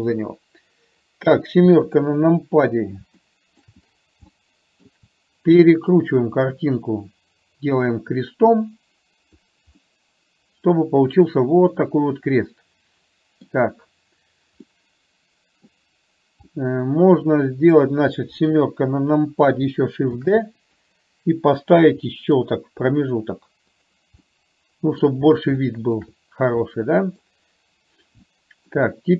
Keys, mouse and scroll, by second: 0.0 n, 1.8 KP_7, 3.3-3.7 shift+middle drag, 4.3-4.8 shift+middle drag, 6.2-9.3 drag, 9.8-13.5 middle drag, 14.7-15.7 middle drag, 16.6-17.8 middle drag, 18.5 KP_7, 20.3 shift+d, 22.0 r, 24.2-25.1 middle drag, 25.7 shift+middle click, 26.7-27.3 middle drag, 28.3-28.8 shift+middle drag.